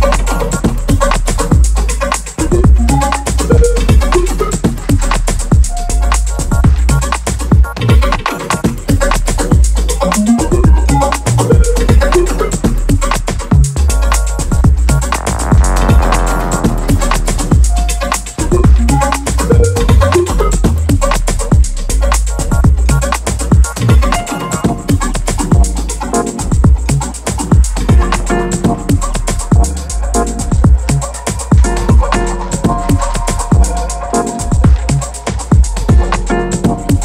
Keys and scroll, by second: 0.2 x, 1.3 z, 4.3 shift+Right, 7.5 shift+c, 9.8 shift+c, 15.4-17.3 typing, 19.1 shift+Left, 19.4 shift+Up, 19.5 shift+Down, 20.1 ctrl+v, 22.8 shift+Left, 22.9 shift+Right, 24.0 shift+c, 29.5 x, 32.5-34.5 typing, 34.3 Return, 35.8 x.